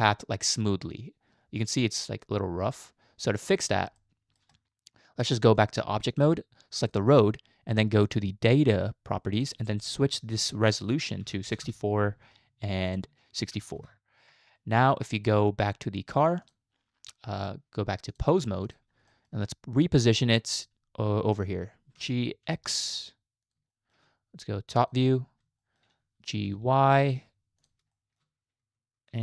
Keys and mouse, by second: 4.0-4.4 shift+middle drag, 5.7 click, 9.4-11.8 drag, 12.9 click, 18.2-18.7 drag, 19.1 shift+middle click, 22.0 g, 23.7 shift+middle click, 25.7 shift+middle drag, 26.3 g, 28.0 shift+middle click, 28.6 g.